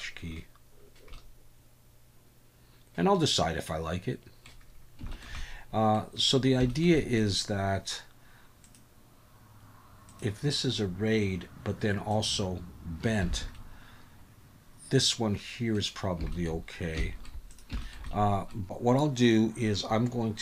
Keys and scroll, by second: 13.3 alt+a.